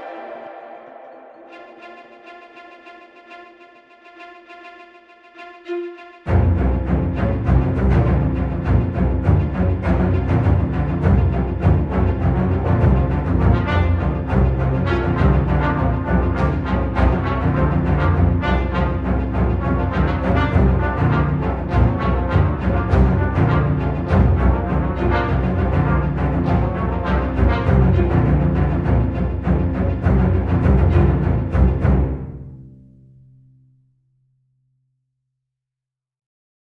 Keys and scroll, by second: 18.9 9, 18.9 Return, 25.6 shift+p.